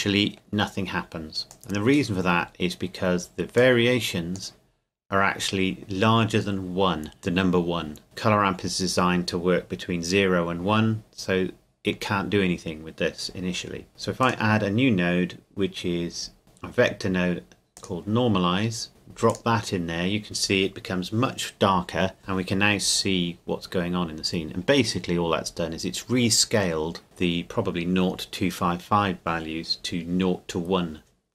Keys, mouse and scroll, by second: 0.1 middle click, 1.5 click, 2.2-3.6 scroll up 1, 3.6 click, 5.1-7.0 scroll down 1, 7.1-8.0 scroll down 1, 8.0 click, 11.3-13.4 scroll up 1, 14.2 click, 17.8 click, 24.6 scroll up 1, 25.6-27.0 scroll down 1.